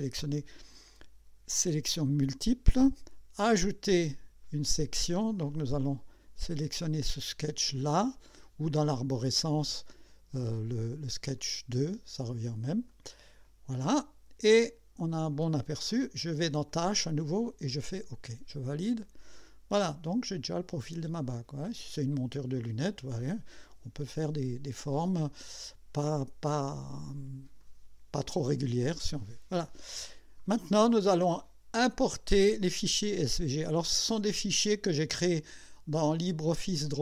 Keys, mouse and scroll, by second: 1.9 click, 4.4 click, 9.4 click, 11.4 click, 12.9-15.8 drag, 16.7 click, 17.7 click, 19.2-21.7 drag, 22.6 click, 27.6-28.5 drag, 29.2-30.0 drag, 34.5 click.